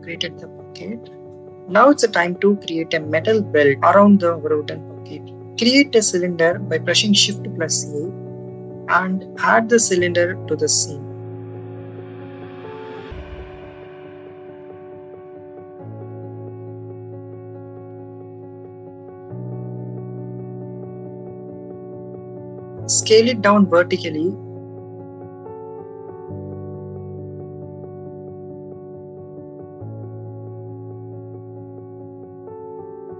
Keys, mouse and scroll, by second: 3.6 click, 6.3 shift+a, 11.3-14.4 drag, 14.5-16.5 drag, 18.6 click, 21.5 click, 22.6 z, 24.9 click, 25.6-28.1 drag, 28.1-29.1 drag.